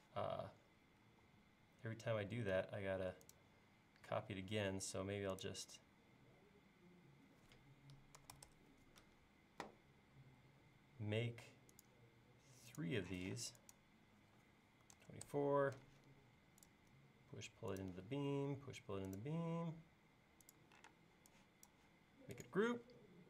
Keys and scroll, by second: 1.1 l, 8.0-8.8 typing, 13.2 p, 14.6-15.5 typing, 20.9 space.